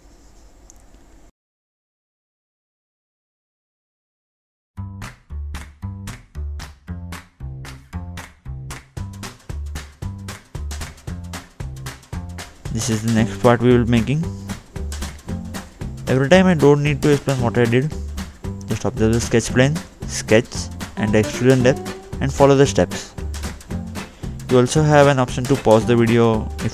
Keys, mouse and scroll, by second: 0.3 click, 0.6 scroll up 2, 1.4 middle click, 1.9-2.7 scroll down 2, 2.8 click, 3.6 right click, 5.7 middle click, 6.7-7.1 scroll up 2, 7.1 scroll down 2, 8.0 middle click, 9.7 scroll down 1, 14.7 middle click, 14.9-15.3 scroll down 2, 15.4 middle click, 22.6-23.3 scroll up 1, 23.3 click.